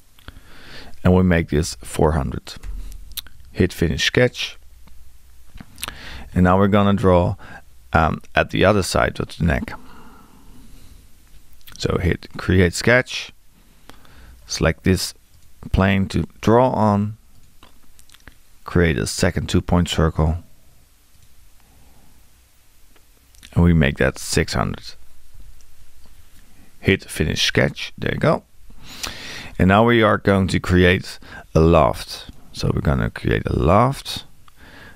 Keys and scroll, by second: 1.3 4, 23.8-24.8 typing.